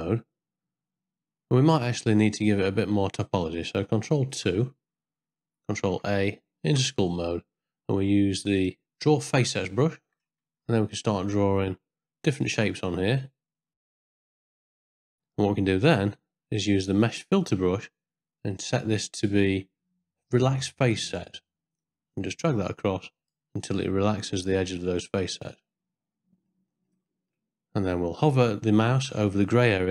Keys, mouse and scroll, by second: 2.6 Tab, 4.3 ctrl+2, 5.8 ctrl+a, 6.6 Tab, 8.6 click, 9.8 middle click, 10.6 f, 11.3-12.5 drag, 12.8 middle click, 13.7 click, 13.9 ctrl+shift+middle click, 14.2 f, 14.3 click, 14.4 ctrl+middle click, 14.6 f, 14.8 click, 15.1 middle click, 17.0 click, 18.5-20.9 drag, 21.8-23.3 drag, 23.8 ctrl+middle click, 25.1-26.5 middle drag, 26.7 ctrl+middle click, 27.1 shift+middle click.